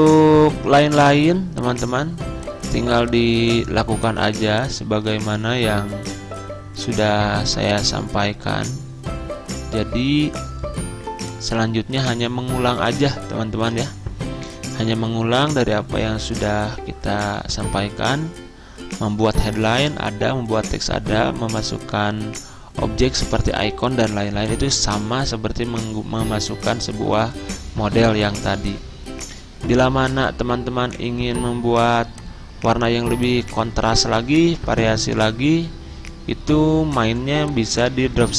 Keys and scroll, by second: 34.6 ctrl+z.